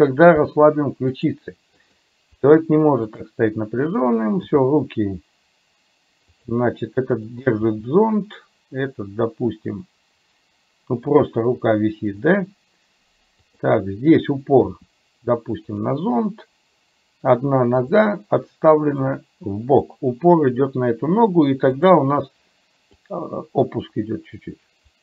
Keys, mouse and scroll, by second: 0.5 r, 1.9 click, 2.4 r, 4.5 g, 7.2 click, 7.7 g, 13.5 click, 14.8 r, 19.0-20.0 drag, 21.8 click, 23.2-25.0 drag.